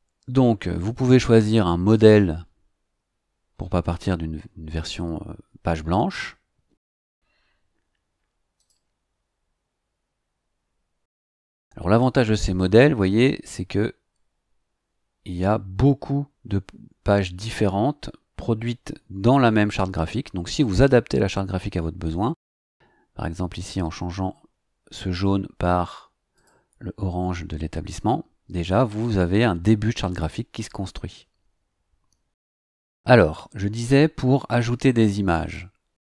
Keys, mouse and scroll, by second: 2.1 scroll down 1, 2.9 scroll down 2, 6.9 click, 8.5 click, 23.6 click, 26.3 click, 35.3 click.